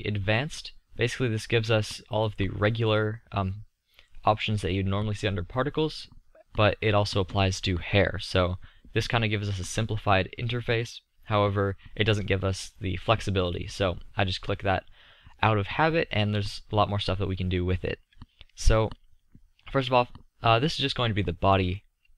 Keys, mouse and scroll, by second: 15.2-18.8 middle drag.